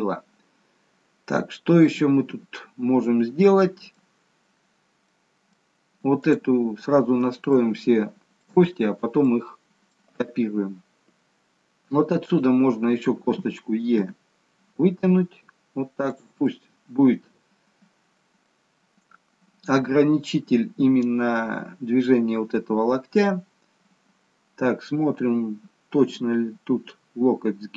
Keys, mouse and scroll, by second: 0.3-0.7 scroll down 1, 1.8 middle click, 4.5-4.9 scroll down 1, 5.1 middle click, 6.3 click, 8.1 shift+middle click, 8.8 scroll up 2, 9.2 middle click, 12.4 click, 14.2 e, 16.6 middle click, 18.2-18.6 scroll up 1, 18.6 middle click, 20.5-21.2 scroll down 1, 21.2 scroll down 1.